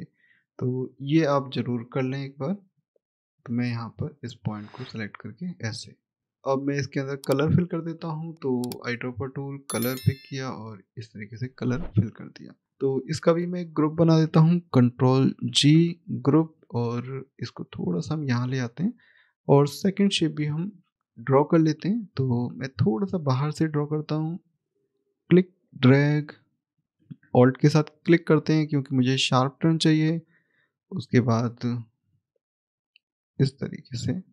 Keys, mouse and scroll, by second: 0.6 click, 5.0-6.2 scroll down 1, 7.0 click, 12.2-12.6 scroll down 1, 12.6 click, 17.1 click, 18.9-20.9 scroll up 1, 21.7 click, 27.9 alt+click.